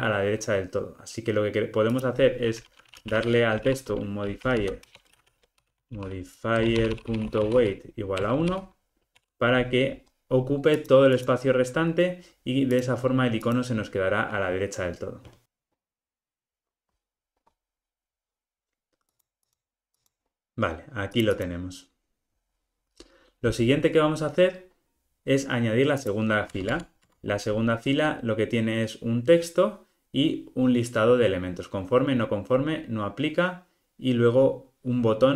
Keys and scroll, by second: 4.9 Return, 19.2 super+-, 21.1 super+=, 26.5 Tab.